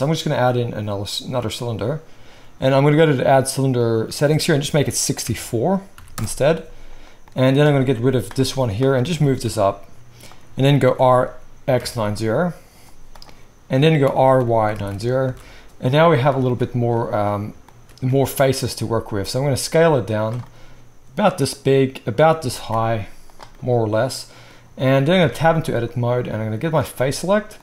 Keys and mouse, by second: 3.0-7.7 drag, 7.7-8.8 middle drag, 7.8 x, 8.8 click, 8.9-26.7 middle drag, 9.1 g, 10.8 r, 14.0 r, 18.7 s, 22.3 g, 25.2 Tab, 26.7-27.6 drag.